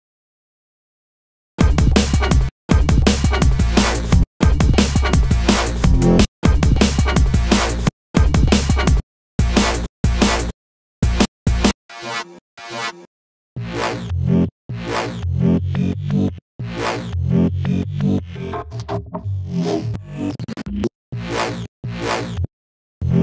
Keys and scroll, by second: 3.2 super+v, 3.8 space, 5.7 space, 7.3 space, 15.8 space, 19.0 space, 20.2 space.